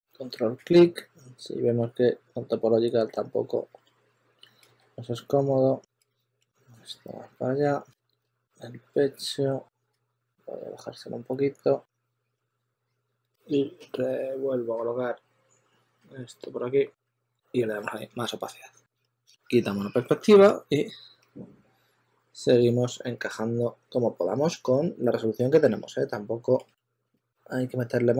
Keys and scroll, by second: 0.0-1.2 typing, 2.5 typing, 3.7 typing, 4.6 super+z, 5.9 super+a, 6.1-6.8 typing, 7.8 super+z, 8.1 super+z, 13.1 z, 17.9 q, 18.4 z, 23.3 s, 26.3-27.6 typing.